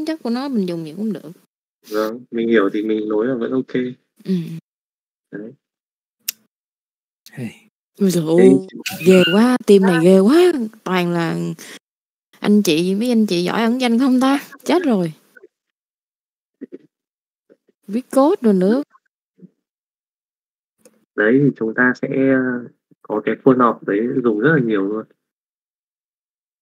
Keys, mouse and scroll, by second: 0.2 click, 0.6 middle click, 2.2 middle click, 3.4 middle click, 12.3 click, 13.1 middle click, 16.1 KP_Divide, 18.2 middle click, 19.2 shift+middle click, 20.3 shift+middle click, 21.5 middle click, 22.2 click, 23.6 click, 24.2 middle click, 24.9 click, 25.6 alt+a.